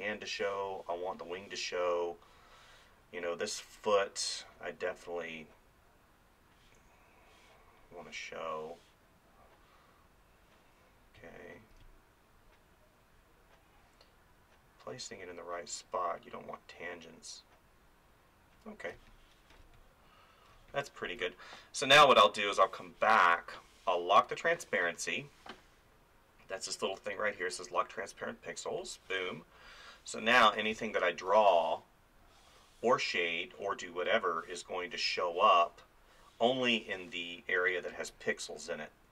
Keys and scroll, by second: 11.2 space, 19.0 space, 30.7 space.